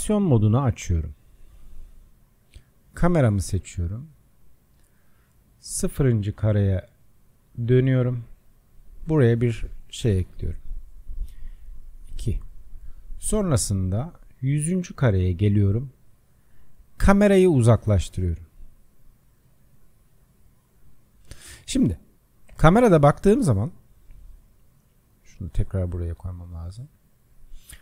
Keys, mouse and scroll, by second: 0.1-27.8 drag.